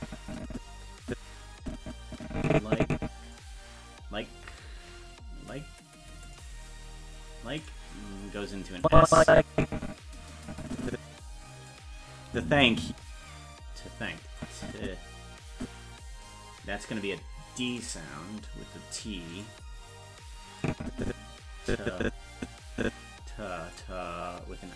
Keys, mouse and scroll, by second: 6.3 click, 7.6 click, 8.8-11.7 drag, 12.3 space, 13.9 space, 14.4-16.2 drag, 17.7 click, 19.3 click, 20.6-23.7 drag.